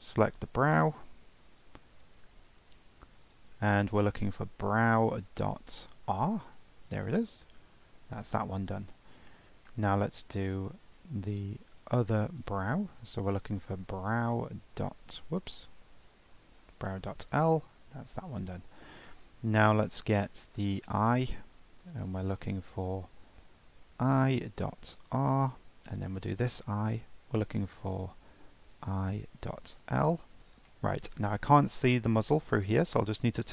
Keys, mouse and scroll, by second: 0.6-1.3 scroll down 9, 1.6-6.4 drag, 9.6 shift+middle click, 10.4 click, 12.4-15.5 drag, 17.9 scroll down 3, 18.5-18.9 shift+middle drag, 18.9 scroll up 2, 19.1-19.7 shift+middle drag, 19.7-20.8 scroll up 1, 20.8 click, 21.9-25.1 drag, 25.9 click, 26.9-30.0 drag, 30.2 scroll down 1, 30.4 scroll up 2, 30.7-31.5 shift+middle drag, 31.5 click, 32.6 click.